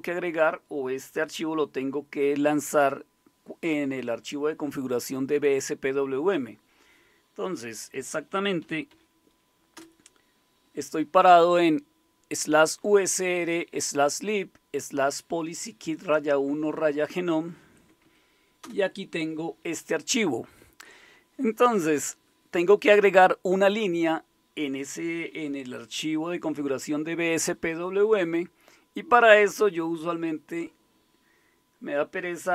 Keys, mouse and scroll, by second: 8.0-9.4 typing, 9.7 Return, 17.6-18.6 typing.